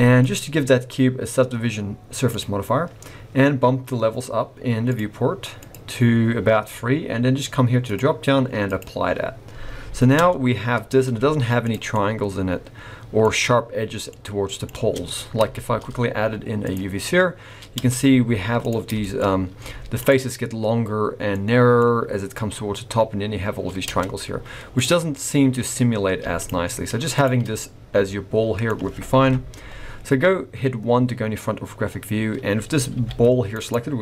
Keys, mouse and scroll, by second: 0.2 click, 4.8 click, 5.5 click, 7.8 click, 9.5-10.2 scroll up 2, 10.2 Tab, 10.6 scroll up 2, 11.1 z, 11.9 middle click, 14.1 middle click, 14.8 Tab, 15.5 shift+a, 17.8 Tab, 18.2 z, 19.0 shift+middle click, 19.2-19.6 scroll up 3, 19.6 z, 21.3 middle click, 21.8 scroll up 2, 23.8 Tab, 24.1 scroll down 3, 24.3 z, 25.0 scroll down 2, 25.1 middle click, 25.9 scroll down 2, 26.1 x, 27.1 click, 27.5 middle click, 29.2 KP_1, 30.9-31.9 scroll up 1, 31.9-32.3 scroll down 1, 32.9 g.